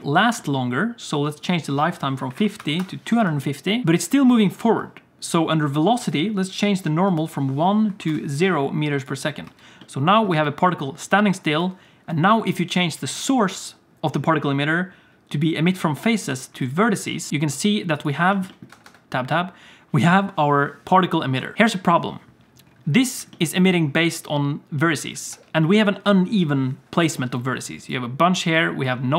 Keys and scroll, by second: 3.2 space, 3.8 1, 4.6 space, 9.4 space, 10.3 space, 18.7 Tab, 18.8 Tab, 25.3 Tab.